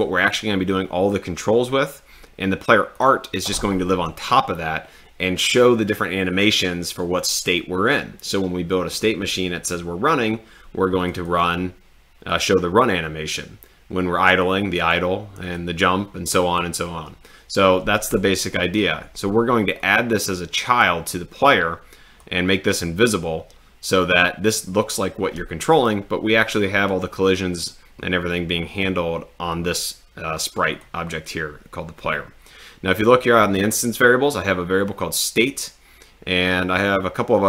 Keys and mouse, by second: 3.0 click, 11.0 click, 12.3 click, 19.8-22.4 drag, 24.5-26.0 drag, 30.7 click.